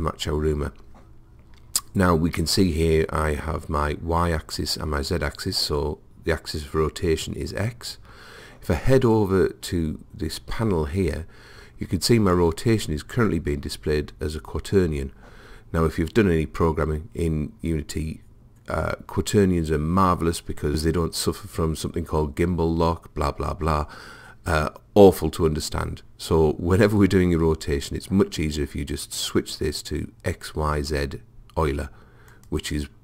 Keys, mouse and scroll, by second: 29.0 click.